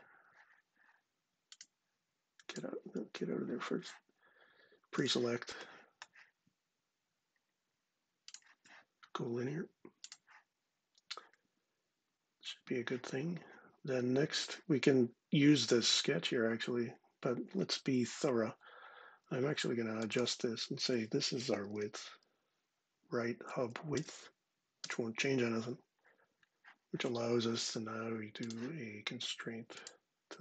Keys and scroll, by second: 19.2 ⟲, 20.8-21.9 typing, 23.0 Down, 23.3 Down, 23.6 Return, 24.5 Return.